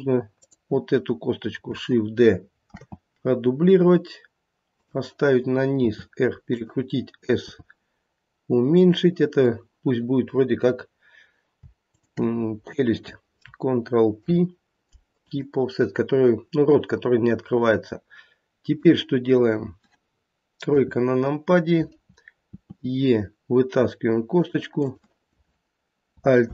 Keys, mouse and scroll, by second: 0.3 click, 2.7 shift+d, 5.7 r, 7.5 s, 11.9 shift+click, 14.2 ctrl+p, 17.0 scroll up 1, 18.7 click, 20.6 KP_3, 22.6 e, 24.8 click, 26.4 alt+p.